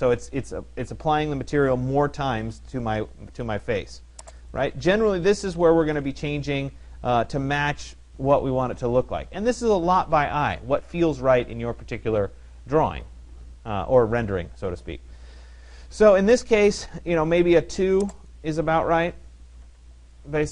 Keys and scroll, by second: 4.9 1, 5.5 Delete, 5.7 2, 7.6 BackSpace, 8.5 Tab, 18.3 2, 19.4 Tab.